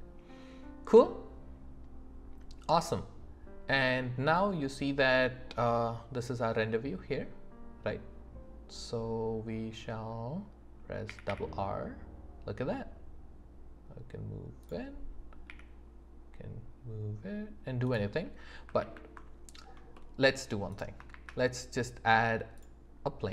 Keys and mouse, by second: 11.1 r, 11.3 r, 14.6 right click, 15.5 r, 17.9-18.5 right drag, 18.8 ctrl+z, 19.9-20.3 middle drag, 21.1 shift+a.